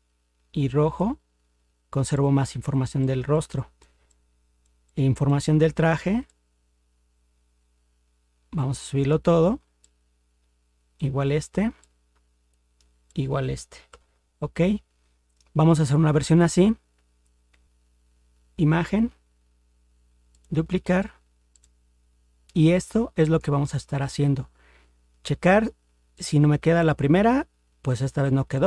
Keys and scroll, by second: 13.9 ctrl+0.